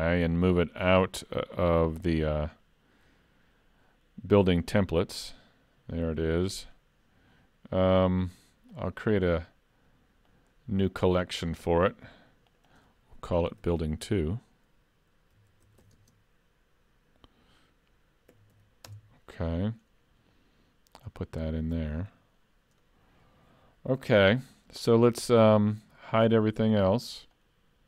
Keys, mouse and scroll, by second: 0.1 right click, 8.7 click, 9.4 right click, 12.5 click, 12.7 click, 21.0 click, 26.6 click, 27.4 click.